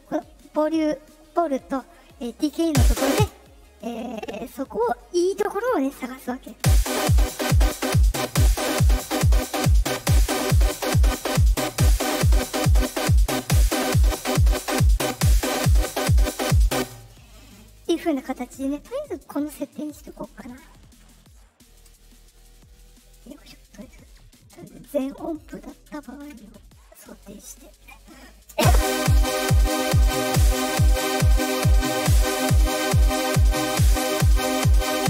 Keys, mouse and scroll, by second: 2.6 space, 3.1 space, 3.4-6.0 drag, 6.4 space, 7.0 click, 8.4-11.4 drag, 11.7 click, 12.4-16.2 drag, 16.7 space, 20.5 ctrl+z, 22.1-25.6 right drag, 25.9 ctrl+click, 27.2 click, 28.5 space, 29.1 click, 33.0-34.4 drag, 34.8-35.0 drag.